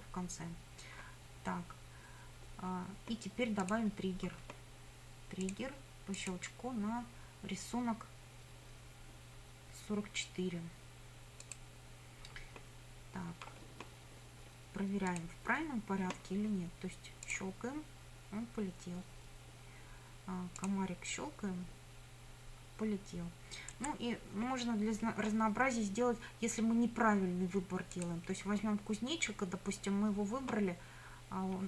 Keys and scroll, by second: 23.8 Escape.